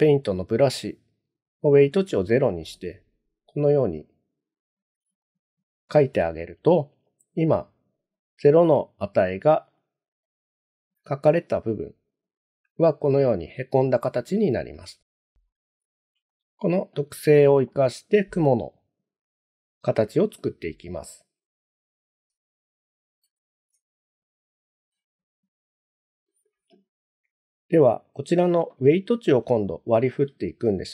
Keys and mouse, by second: 2.8-4.9 drag, 5.2-7.1 middle drag, 8.1 middle click, 10.3 middle click, 11.3 click, 12.3 middle click, 13.1 middle click, 14.9 shift+middle click, 15.5 middle click, 16.3 shift+middle click, 17.3 middle click, 22.6 ctrl+z, 23.2 ctrl+z, 27.7 click, 28.9 middle click, 29.7 shift+middle click.